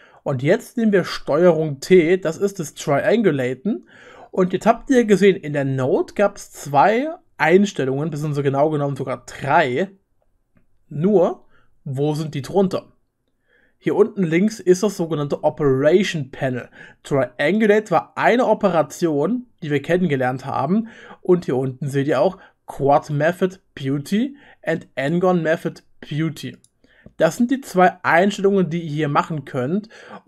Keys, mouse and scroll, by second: 2.7 ctrl+t, 2.9 ctrl+click, 3.2-5.6 drag, 10.1-13.5 drag, 15.7 click, 17.6-21.1 drag, 18.1-21.1 middle drag, 18.1-21.1 right drag, 21.7-27.7 drag, 21.7-26.7 middle drag, 21.7-26.7 right drag, 27.2 middle click, 27.2 right click.